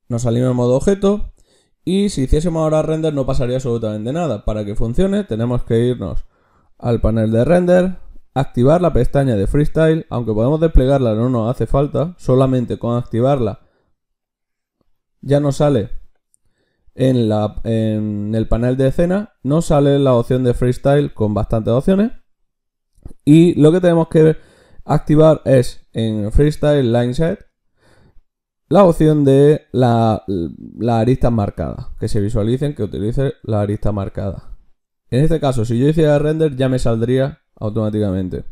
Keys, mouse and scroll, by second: 8.7-17.2 drag.